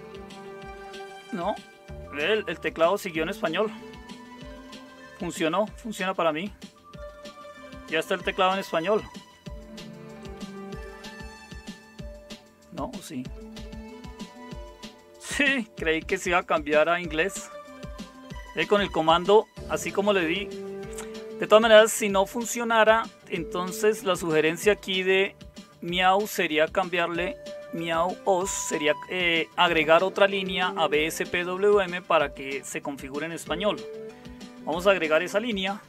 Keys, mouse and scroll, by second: 0.0-6.9 typing, 8.4-8.8 typing, 10.4-11.7 typing, 13.1-14.1 typing, 15.5-17.7 typing.